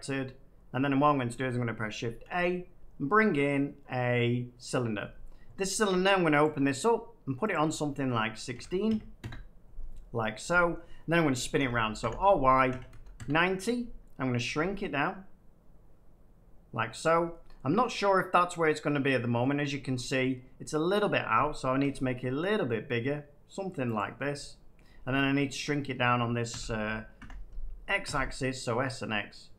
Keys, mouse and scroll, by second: 0.7 Tab, 2.2 a, 4.6-5.6 drag, 6.3 click, 7.4 click, 8.4-8.8 typing, 9.1 Return, 11.5-12.8 typing, 13.1 Return, 14.4 s, 16.9 click, 17.3 middle click, 19.3 middle click, 20.0 shift+middle click, 21.7 s, 23.9 click, 24.7 middle click, 25.0 shift+middle click, 25.1 shift+scroll down 2, 25.3 middle click, 26.4-28.0 typing.